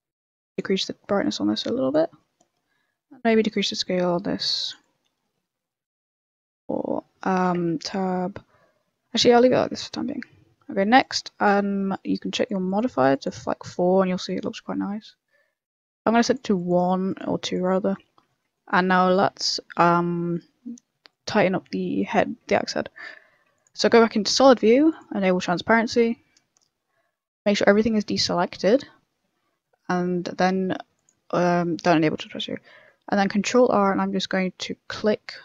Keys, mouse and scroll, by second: 0.2 click, 0.4 click, 2.1 middle click, 2.9 middle click, 3.5 click, 4.8 click, 6.4 middle click, 7.6 Tab, 8.5 Tab, 9.1 middle click, 9.4 middle click, 11.0 click, 12.3 click, 12.6 click, 12.8 click, 13.1 click, 13.6 middle click, 14.1 scroll up 1, 14.2 middle click, 14.8 middle click, 16.2 click, 17.0 click, 17.7 middle click, 18.1 Tab, 18.2 middle click, 18.5 shift+middle click, 18.8 middle click, 19.3 middle click, 19.4 shift+middle click, 19.7 middle click, 19.7 shift+middle click, 21.1 click, 22.0 KP_1, 22.6 z, 23.5 click, 24.9 click, 25.5 a, 25.6 scroll down 3, 25.9 scroll up 1, 26.5 scroll down 1, 26.8 scroll down 3, 27.2 scroll up 1, 28.8 scroll down 1, 28.9 scroll up 2, 29.6 middle click, 30.9 click, 31.2 middle click, 31.8 middle click, 32.6 middle click, 32.7 ctrl+r.